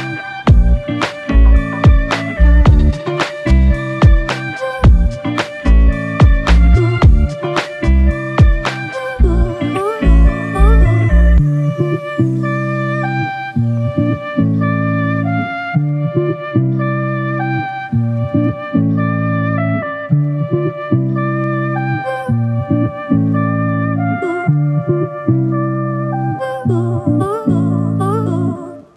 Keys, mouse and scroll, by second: 1.3 alt+click, 3.5 ctrl+z, 3.9 ctrl+z, 8.5 alt+click, 12.7 alt+click, 16.6 alt+click, 20.3 shift+click, 23.0 shift+click, 25.5 shift+l, 26.0 shift+click, 28.2 shift+click.